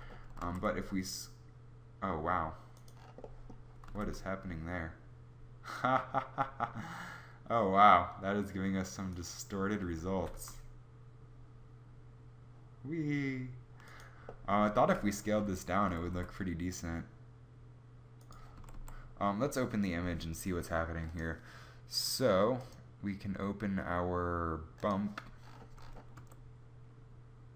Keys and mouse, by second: 0.5 s, 3.9 s, 10.1 g, 16.0 s, 18.5 a, 18.7 a, 26.1 a.